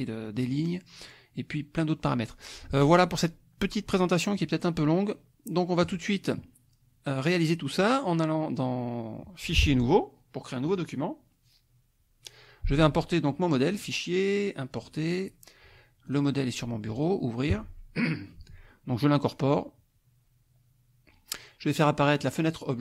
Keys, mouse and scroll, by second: 0.2 click, 0.5 middle click, 4.3 click, 5.8 click, 9.8 click, 10.7 click, 13.7 click, 14.8 click, 16.1 click, 17.0 click, 19.3 click, 22.2 click.